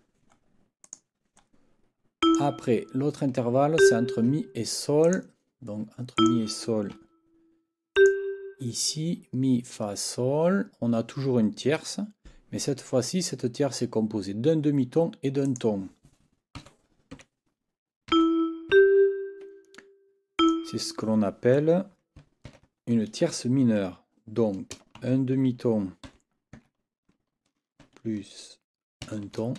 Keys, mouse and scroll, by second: 0.8 click, 2.2 click, 3.8 ctrl+click, 5.0 click, 6.2 click, 7.9 shift+click, 15.5 click, 16.6 n, 17.1 6, 18.1 e, 18.7 g, 20.4 click, 22.5 ctrl+t, 29.0 shift+t.